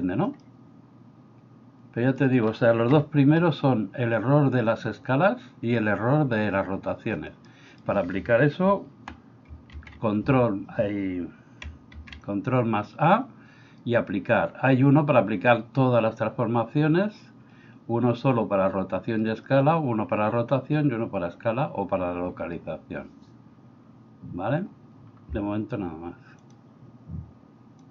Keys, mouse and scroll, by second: 0.4-2.2 middle drag, 2.9 KP_1, 7.5 middle click, 9.7 shift+a, 12.0 ctrl+a.